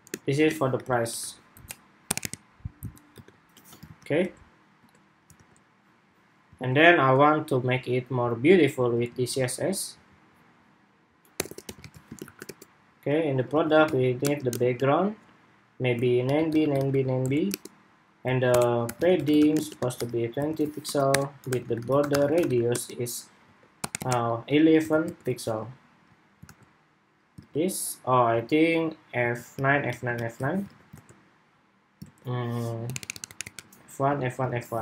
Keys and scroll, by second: 3.7 super+s, 4.1 super+Tab, 4.7 super+Tab, 5.1 super+r, 6.3 super+Tab, 8.8 super+c, 11.5 super+v, 25.0 super+s, 25.4 super+Tab, 26.3 super+r, 27.1 super+Tab, 30.1 super+s, 30.5 super+Tab, 30.7 super+r, 31.8 super+Tab, 34.7 super+s.